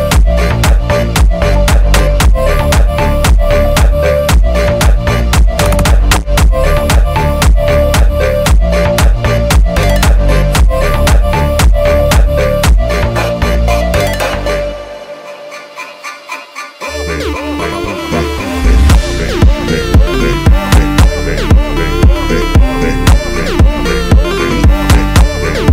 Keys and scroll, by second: 0.0-2.9 typing, 0.0 Return, 0.9 Return, 1.8 Return, 2.7 Return, 3.7 Return, 4.2-11.0 typing, 5.2 Return, 6.1 Return, 7.2 Return, 8.3 Return, 9.2 Return, 10.3 Return, 11.7 Return, 12.1 1, 12.9 7, 13.3 Return, 13.5 1, 14.0 8, 14.9 Return, 15.1-22.1 typing, 16.0 Return, 16.9 Return, 17.9 Return, 19.1 Return, 20.1 Return, 21.5 Return, 23.6 Return, 23.8 2, 24.9 Return, 25.2 2.